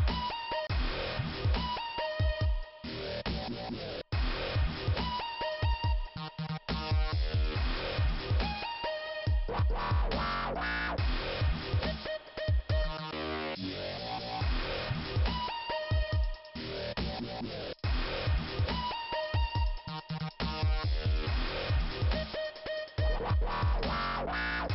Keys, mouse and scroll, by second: 1.1-1.5 scroll up 1, 1.7 scroll down 1, 3.9 click, 5.7 click, 8.3 click, 10.9 click, 14.6 click, 16.5-16.8 scroll up 1, 16.8 middle click, 20.1 click, 20.3 click, 23.1 click, 24.1 click, 24.4 right click, 24.5 double right click.